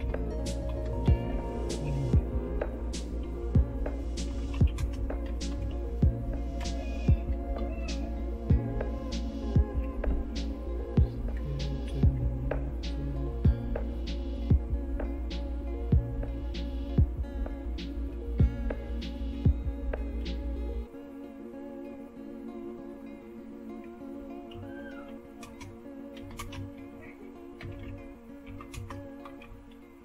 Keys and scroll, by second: 0.0-1.5 typing, 4.0-5.5 typing, 5.7 Tab, 6.6 Return, 7.6 Down, 8.1 Down, 8.1-12.0 Down, 12.6 Down, 14.1-18.8 Down, 19.3-20.1 Up, 19.7-20.4 typing, 22.4-23.2 typing, 24.5-30.0 typing.